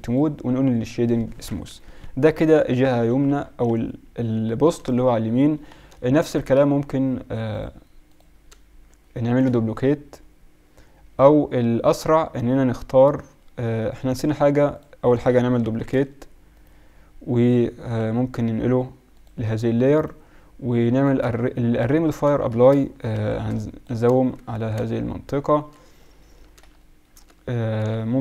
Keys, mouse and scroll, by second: 0.0 click, 0.7 t, 1.6 KP_1, 2.0-2.8 KP_Subtract, 3.0 KP_Subtract, 3.2 KP_Subtract, 3.4 KP_Subtract, 3.6-4.3 KP_Subtract, 7.5 middle click, 9.3-10.7 drag, 14.7-16.5 drag, 15.7 shift+d, 18.0 m, 20.0 right click, 21.8 middle drag, 21.9-22.8 drag, 23.1 shift+b, 24.6 Tab, 25.2 middle click, 25.4 middle click, 25.5 middle click.